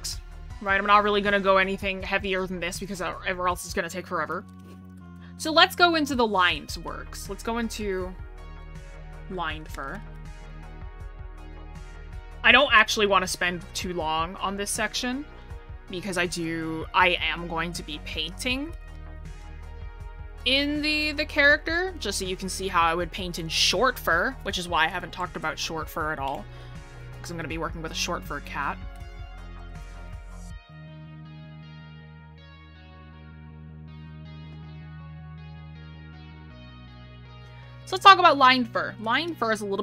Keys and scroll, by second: 5.9 scroll up 1, 6.4 scroll, 6.9 scroll up 1, 8.0 scroll down 1, 36.7-37.0 scroll, 38.0 scroll up 1, 38.9 scroll.